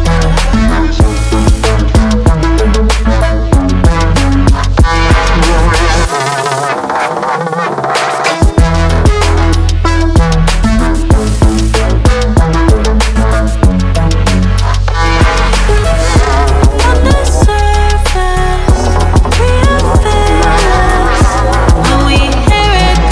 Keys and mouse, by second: 0.3 ctrl+middle click, 0.6 middle click, 1.3 ctrl+middle click, 2.8 shift+middle click, 3.8 middle click, 4.6 middle click, 7.5 ctrl+s, 14.6 click.